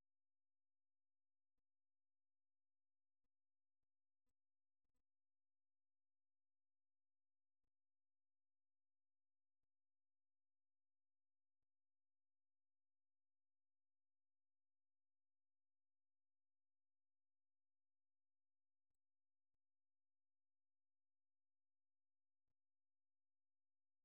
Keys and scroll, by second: 0.0-0.6 typing, 3.1-4.3 typing, 4.5 super+2, 6.8 super+1, 8.5 super+2, 11.5-11.9 typing, 13.5-15.6 typing.